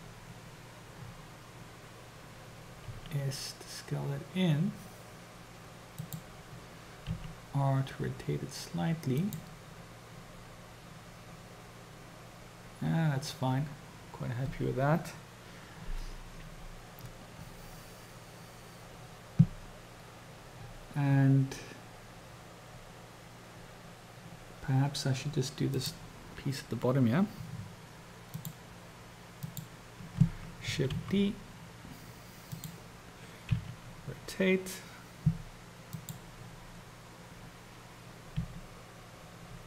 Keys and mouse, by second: 2.9 s, 7.2 r, 25.8 click, 28.3 shift+click, 29.6 shift+click, 31.4 shift+d, 33.6 r, 38.7 g.